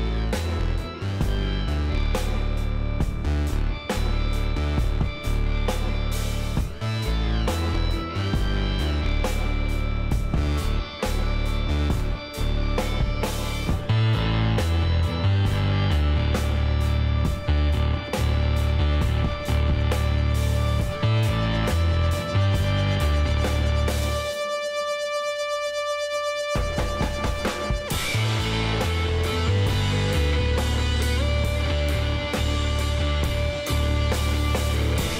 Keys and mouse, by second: 1.2-2.3 drag, 2.3-7.5 middle drag, 4.3 s, 7.5-9.6 drag, 9.9 s, 16.4-21.8 drag, 20.9 x, 22.7-24.2 middle drag, 26.1-31.3 middle drag, 31.5 middle click, 32.1 KP_3, 33.8 s.